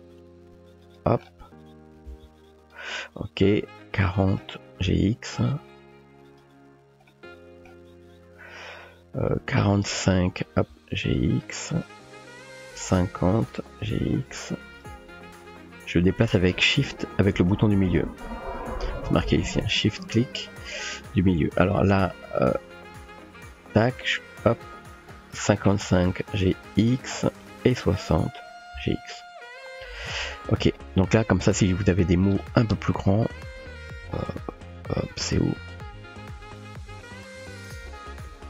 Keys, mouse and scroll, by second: 2.1 g, 3.6-4.4 drag, 4.9 g, 7.2 click, 9.3-10.1 drag, 10.5 g, 12.6-13.4 drag, 13.9 g, 15.3-16.9 shift+middle drag, 16.9-18.7 shift+drag, 22.7-25.5 drag, 25.9 g, 27.4-28.4 drag, 28.7 g, 31.9 Tab, 33.3 Tab, 33.7 BackSpace, 34.1 Tab, 34.3 BackSpace, 34.6 BackSpace, 36.5 click, 38.3 BackSpace.